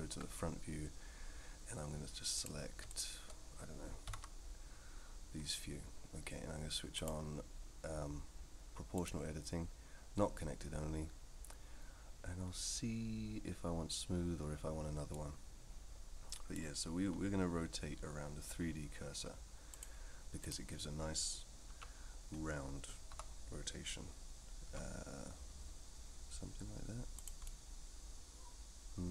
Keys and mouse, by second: 0.1 KP_1, 2.4 click, 2.9 shift+click, 6.9 click, 9.1-14.8 drag, 15.1-16.5 middle drag, 19.8-20.5 drag, 21.7 KP_3, 23.1 r, 27.4-29.1 middle drag.